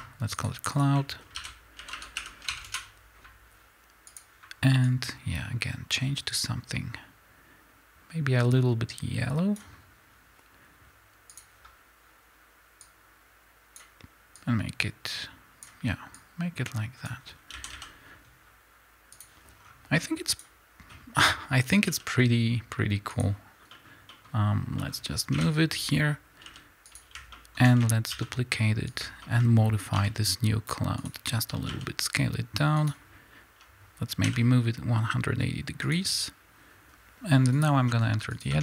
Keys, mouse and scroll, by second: 2.7 Return, 12.9 click, 17.6 a, 19.1 click, 19.6 scroll up 1, 20.0-20.4 scroll down 1, 20.4 click, 21.9 g, 23.2 click, 25.4 KP_7, 26.4 g, 26.9 click, 28.2 shift+d, 29.0 click, 30.0 r, 30.2 middle click, 31.1 click, 31.7 s, 32.9 click, 34.2 r, 35.9 click.